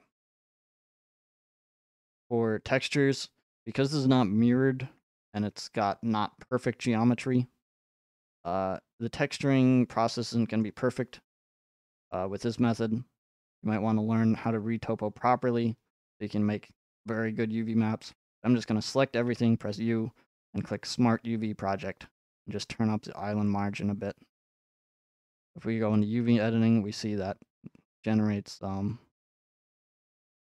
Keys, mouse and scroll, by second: 1.2 ctrl+Tab, 1.8 click, 2.3-2.7 scroll up 4, 3.8-4.1 scroll, 4.9 Tab, 5.3-5.7 scroll, 6.2 scroll, 7.0 middle click, 8.1-10.5 middle drag, 8.1-8.5 scroll, 10.6-14.3 shift+middle drag, 18.1 a, 19.3 u, 20.7 click, 23.5 click, 24.4 click, 24.9 click, 26.0 click, 26.6 middle click, 28.1 scroll, 28.8 scroll, 29.4-30.0 scroll, 29.8 middle click.